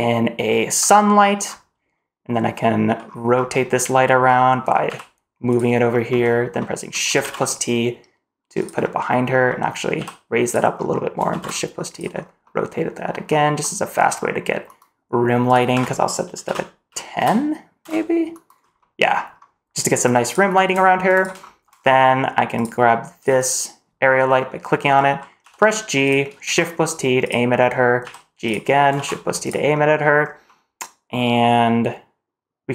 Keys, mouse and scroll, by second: 1.4-1.8 scroll down 1, 3.0-3.3 scroll up 2, 3.3-4.2 scroll down 2, 4.3 middle drag, 4.8 g, 6.5 middle drag, 7.1 shift+t, 8.7 middle drag, 9.2 scroll down 1, 9.4 middle drag, 9.9 g, 10.7 middle drag, 11.2 shift+t, 12.2 scroll up 3, 12.3 middle drag, 13.2-13.5 middle drag, 13.9 middle click, 15.4-17.8 drag, 18.5 scroll up 2, 18.7 middle click, 19.9-21.1 drag, 21.3 shift+middle drag, 21.7-22.5 scroll down 1, 22.5 click, 22.5 scroll down 1, 23.3 click, 24.9 middle click, 25.3 g, 26.3 shift+t, 27.4 middle click, 27.9 g, 28.9 shift+t, 29.6 middle drag, 30.1 scroll up 2, 30.4-31.0 middle drag, 31.6-32.6 scroll up 1, 32.6-32.7 scroll down 1.